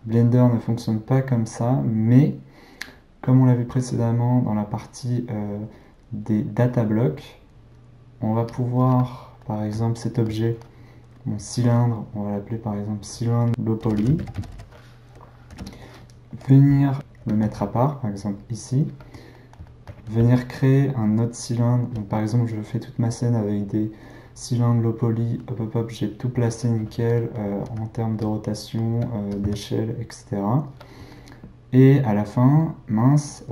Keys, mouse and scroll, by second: 8.5 click, 9.4-12.5 middle drag, 12.5 click, 12.7-14.7 drag, 17.2 g, 19.3-22.6 middle drag, 27.8 r, 28.5-28.9 middle drag, 28.9 g, 29.4 s, 30.9-33.5 middle drag.